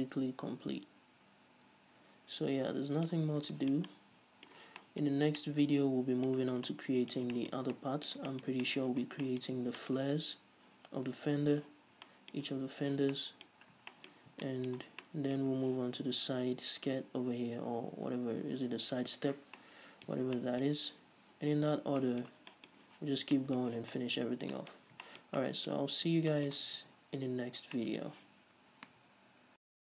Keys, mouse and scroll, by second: 3.6 scroll down 2, 4.9 scroll down 2, 5.4-5.7 scroll up 2, 6.8 scroll down 2, 9.4 scroll down 2, 9.8 scroll up 2, 13.8-14.2 scroll up 2, 14.6 scroll down 2, 24.6-25.2 scroll up 4, 25.2 scroll down 2, 26.4 scroll down 2, 27.3 ctrl+s, 27.8 scroll up 2.